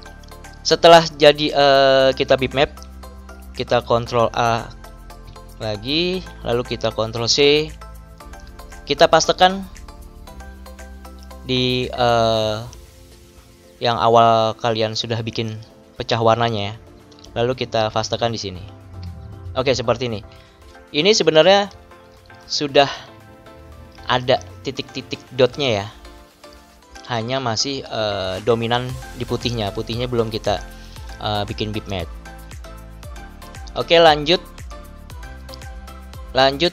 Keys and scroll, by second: 5.1 ctrl+a, 7.2 ctrl+c, 18.7 ctrl+v, 21.7 ctrl+=, 27.0 ctrl+-.